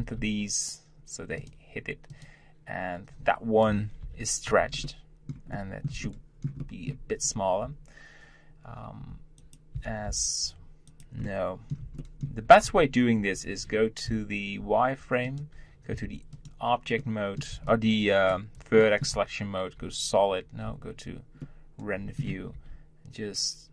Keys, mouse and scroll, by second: 2.1 click, 4.0 ctrl+l, 4.8-7.1 shift+middle drag, 7.1-9.0 scroll up 1, 9.0 g, 9.8 s, 11.2-12.8 middle drag, 12.8 Tab, 13.2 Tab, 14.1 z, 15.2 click, 15.9 1, 16.3 click, 17.0 middle click, 17.5 b, 18.8 middle click, 19.1 z, 20.6 z, 21.4-22.5 middle drag, 22.5 g.